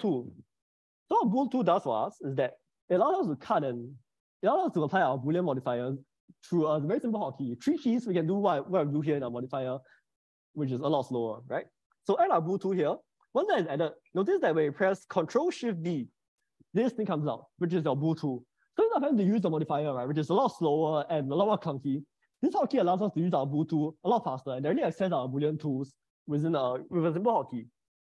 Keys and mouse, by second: 15.7 ctrl+shift+b.